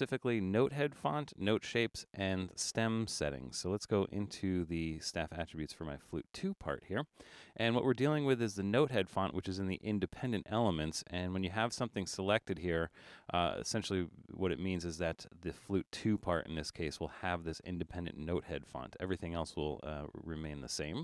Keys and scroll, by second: 0.0 super+=, 0.5 super+=, 1.1 super+=, 1.7 super+=.